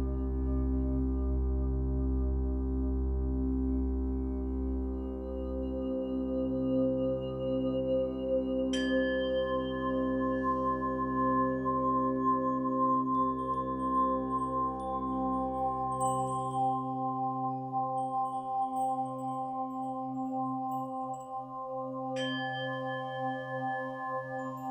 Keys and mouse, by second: 0.7-4.9 ctrl+alt+drag, 5.1 3, 5.3 Return, 6.5 alt+r, 7.5 ctrl+s, 9.9-11.7 drag, 13.3 -, 15.8-16.8 shift+drag, 17.1-17.7 drag, 18.6-21.7 alt+shift+drag, 23.4-24.2 drag, 24.5 click.